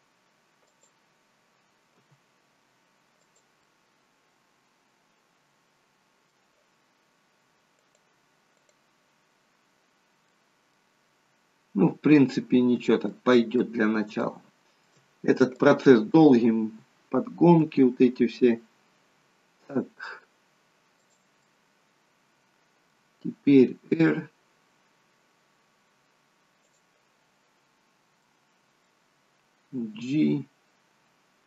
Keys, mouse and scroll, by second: 2.1 g, 3.6 middle click, 7.9 click, 8.7 click, 10.0 scroll up 2, 10.3 middle click, 11.1 scroll down 1, 13.1 middle click, 13.7-14.2 scroll down 2, 14.3 shift+middle click, 15.6 click, 17.7 g, 21.6 middle click, 23.5 r, 27.8 scroll up 2, 28.3 middle click, 29.8 g.